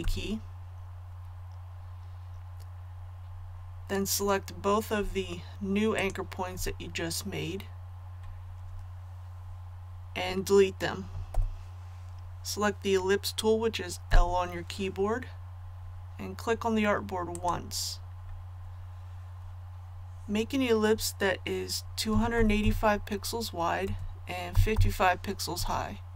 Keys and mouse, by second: 0.0 a, 5.9 shift+click, 11.3 Delete, 14.0 l, 17.3 click, 22.1 KP_2, 22.3 KP_8, 22.6 KP_5, 23.8 Tab, 24.5 KP_5, 25.5 Tab.